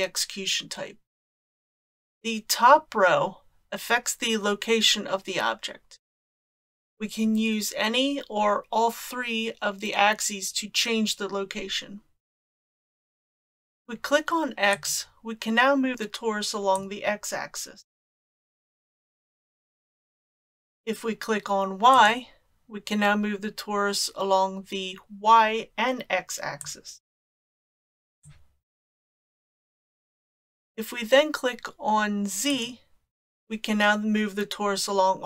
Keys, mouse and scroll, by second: 13.2 click, 14.7 click, 16.8-19.7 drag, 20.3 click, 22.0 click, 26.6 click, 28.3 click, 32.5 click.